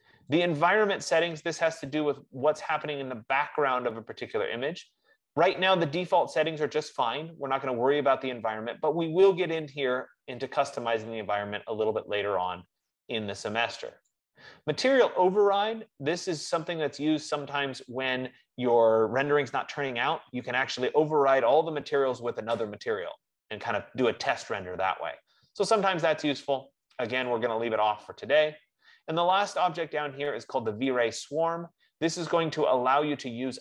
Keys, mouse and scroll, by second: 0.7 click, 14.5 click, 15.8 click, 27.7 click, 31.1 click, 33.4 F15.